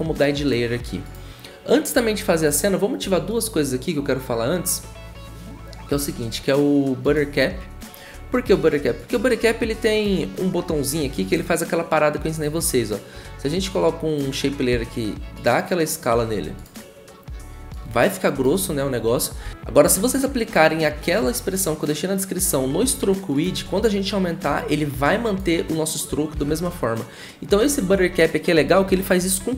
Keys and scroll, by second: 14.7 v, 19.4 ctrl+z, 26.3 ctrl+z.